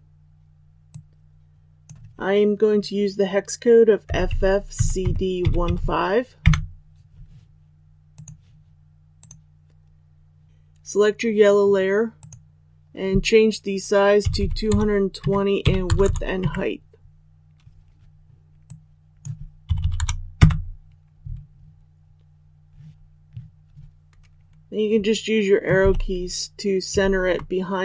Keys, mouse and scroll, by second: 15.2 Tab, 18.6-20.1 drag, 25.7 shift+Left, 26.9 Up.